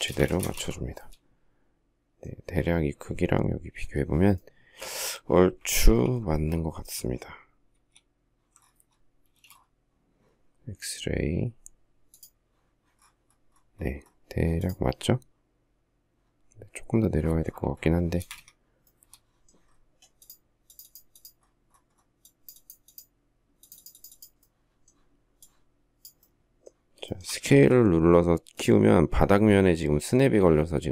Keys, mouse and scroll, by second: 5.6 alt+t, 7.5 alt+f, 9.0 space, 17.9 space, 18.1 Escape, 26.8 shift+middle click, 27.3 s.